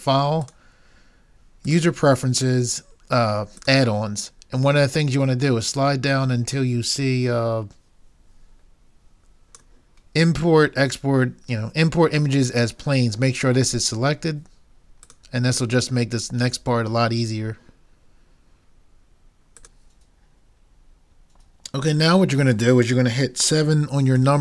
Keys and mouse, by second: 24.2 KP_7.